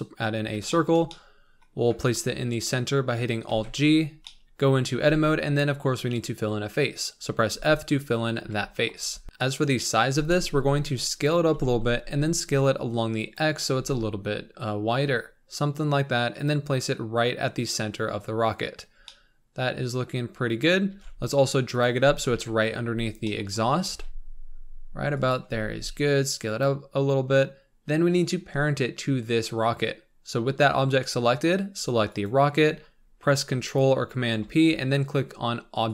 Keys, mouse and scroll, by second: 0.3-0.7 scroll up 3, 0.7-3.4 shift+middle drag, 3.4 alt+g, 3.9 scroll up 3, 4.2 middle click, 4.9 Tab, 7.1-7.5 scroll up 2, 7.5 f, 8.4 KP_7, 9.0 Tab, 9.2 s, 10.0 s, 11.4 s, 13.7 g, 18.8 scroll down 4, 19.0-20.5 middle drag, 20.5-20.9 scroll up 1, 20.9 g, 22.3 KP_1, 23.2 shift+middle click, 23.5 scroll up 4, 23.8 g, 25.5 s, 27.7-32.2 scroll down 4, 32.2 shift+click.